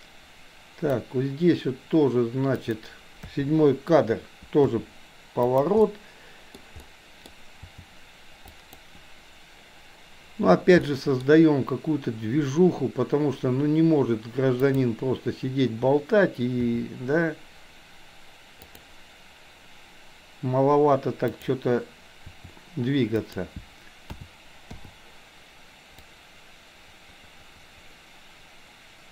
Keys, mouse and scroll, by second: 2.6 click, 3.2 KP_7, 4.7 r, 5.9-6.5 middle drag, 6.7-7.4 middle drag, 7.6 r, 10.9-11.2 middle drag, 16.7 r, 21.2 click, 22.2 r, 24.1 a, 24.7 i, 26.1-29.1 drag.